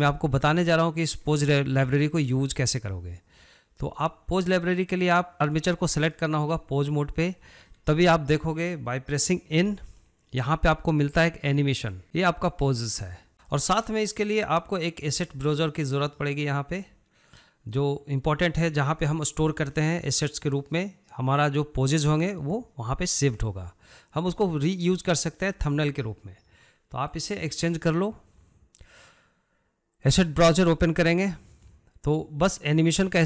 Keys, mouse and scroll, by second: 3.8-5.7 drag, 6.0-9.7 middle drag, 9.7 n, 11.8 click, 13.3-16.5 shift+middle drag, 16.5-19.7 drag, 27.2-30.3 drag.